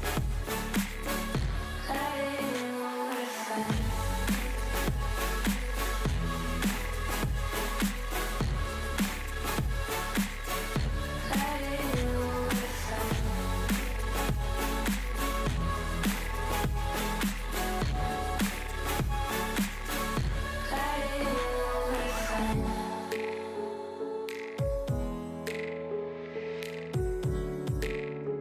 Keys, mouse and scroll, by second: 0.2 middle click, 0.4-0.8 scroll, 1.2-1.5 middle drag, 1.7-2.4 middle drag, 2.5 middle click, 2.9-3.9 middle drag, 4.0-5.3 middle drag, 5.5-7.1 middle drag, 23.5-23.9 drag, 23.9 middle drag, 24.4 KP_0, 24.7-25.4 scroll down 14, 25.4-27.4 middle drag, 27.4 click.